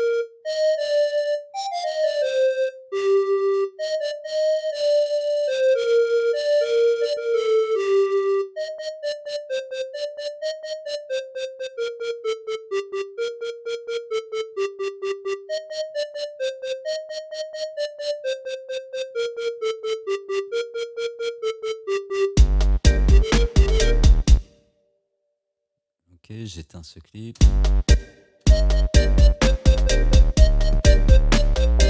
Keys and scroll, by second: 22.4 space, 24.4 space, 27.4 space.